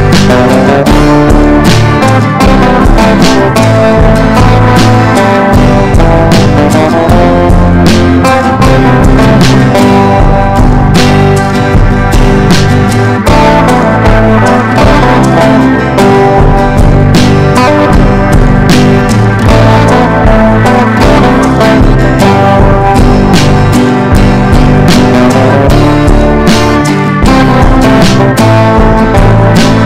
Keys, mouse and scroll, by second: 15.0 click, 16.3 shift+click, 17.3 ctrl+g, 18.4 ctrl+z, 18.7 click, 19.2 shift+click, 19.7 shift+click, 20.2 ctrl+g, 20.9 click, 21.9 ctrl+d, 22.1 click, 23.4 ctrl+d, 23.8 click, 24.0 shift+click, 24.9-29.8 drag.